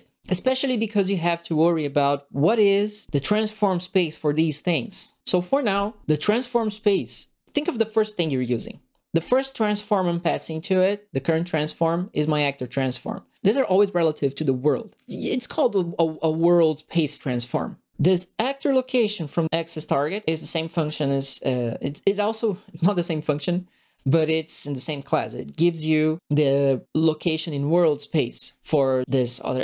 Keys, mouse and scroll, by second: 9.1 click, 20.7 click, 23.8 click, 29.0 click.